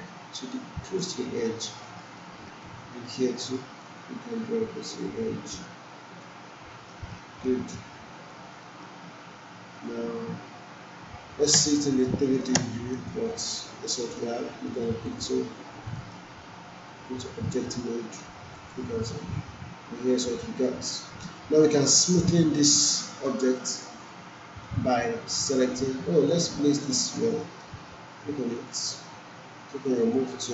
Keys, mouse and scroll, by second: 1.8-2.4 alt+middle click, 3.8-6.3 drag, 6.9 alt+middle click, 7.4 alt+right click, 8.6 alt+middle click, 11.5 space, 13.1-14.2 alt+right click, 14.0 alt+right click, 15.0 click, 16.0 alt+middle click, 16.9-18.4 right drag, 18.5 click, 19.1-22.9 alt+drag, 25.9-26.6 click, 27.4 alt+middle click, 28.6 click.